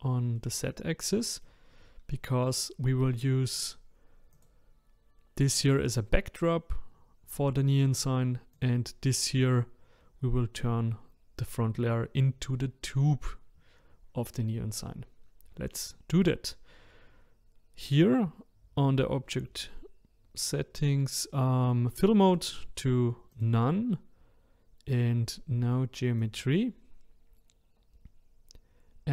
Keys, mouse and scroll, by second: 0.4-1.6 middle drag, 1.6-2.1 scroll up 2, 2.1-3.5 middle drag, 3.5 click, 4.3 click, 8.5 click, 14.6-15.4 scroll up 3, 22.2-25.2 drag, 26.2-29.1 drag.